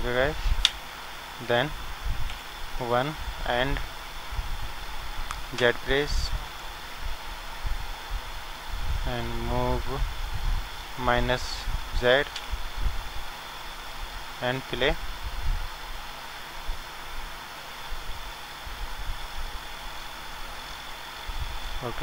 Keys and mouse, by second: 0.6 Tab, 2.3 KP_1, 5.6 z, 7.8-9.7 drag, 13.6 middle click, 14.0 middle click, 15.1-17.1 middle drag, 16.7-18.5 drag.